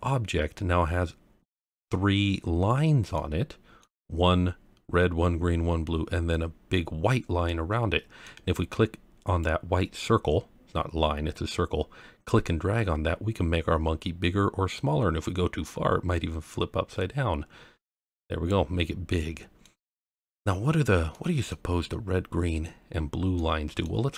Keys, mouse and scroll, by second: 3.1-3.8 middle drag, 7.4-8.2 middle drag, 9.4 click, 18.7-19.2 scroll down 1, 19.2-19.6 middle drag, 19.9-20.3 scroll up 1, 21.1-21.5 middle drag, 23.3-23.8 middle drag.